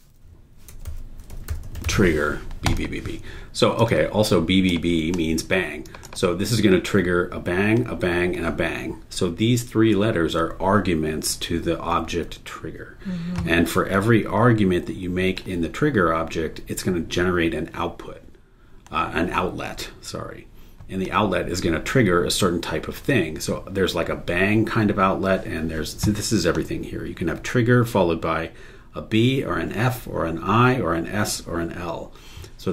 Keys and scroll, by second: 0.3-2.3 typing.